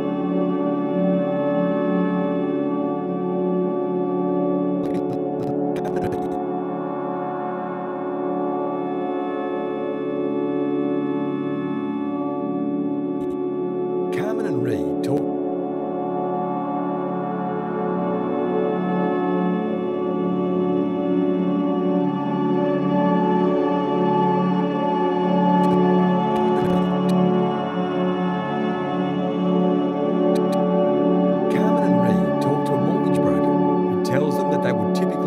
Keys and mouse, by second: 0.3 shift+click, 1.0 shift+click, 1.5 shift+click, 2.5 shift+click, 5.0-5.4 drag, 6.3-7.5 drag, 7.8 click, 8.1-9.2 typing, 8.6 click, 9.4 Return, 10.6 click, 11.6 BackSpace, 11.8 1, 11.9 Return, 13.2 click, 13.6 space, 15.1 space, 17.1-18.0 drag, 17.1 typing, 20.4-21.2 drag, 21.4 click, 22.6 shift+click, 22.9 shift+click, 23.4 shift+click, 24.2 shift+click, 24.7 shift+click, 25.6-27.0 drag, 28.1 click, 29.0 click, 29.9-30.3 drag, 30.3-31.1 drag, 30.7 space.